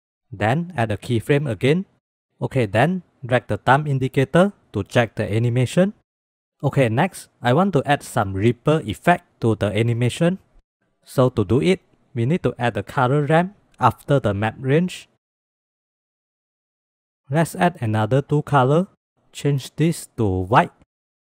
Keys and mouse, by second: 0.1 click, 0.9 click, 2.8-4.0 drag, 11.5 shift+a, 15.2 shift+click, 15.6 g, 16.3 click, 18.0 click, 18.5 click, 19.4 click.